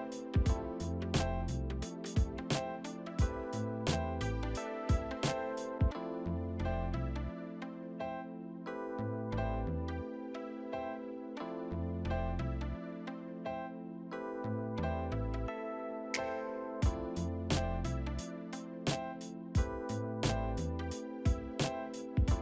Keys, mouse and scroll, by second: 0.3 right click, 0.5 double click, 8.9 F4, 9.6 q, 10.0 ctrl+click, 10.2 ctrl+click, 10.8 w, 20.6 F4, 21.6 e.